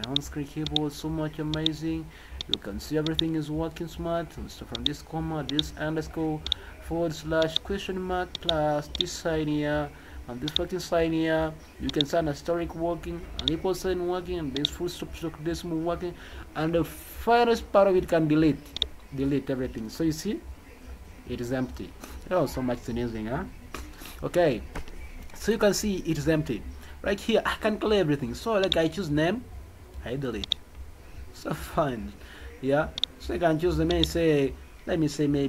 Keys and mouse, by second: 0.0 click, 0.6 click, 1.5 click, 2.3 click, 3.0 click, 4.7 click, 5.4 click, 6.4 click, 7.4 click, 8.3 click, 8.9 click, 10.4 click, 11.8 click, 13.3 click, 14.5 click, 18.7 click, 30.4 click.